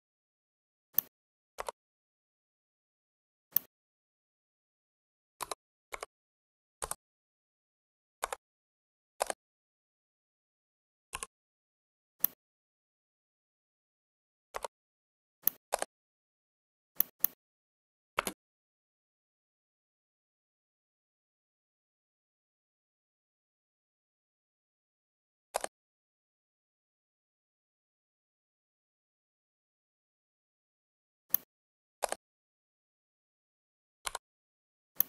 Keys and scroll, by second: 5.3 2, 5.8 x, 6.7 Return, 8.1 Caps_Lock, 18.1 space.